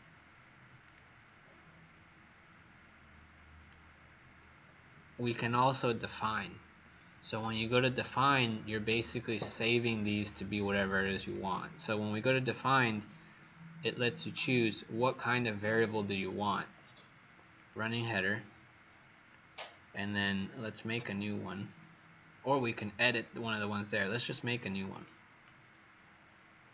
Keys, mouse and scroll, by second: 0.7 click.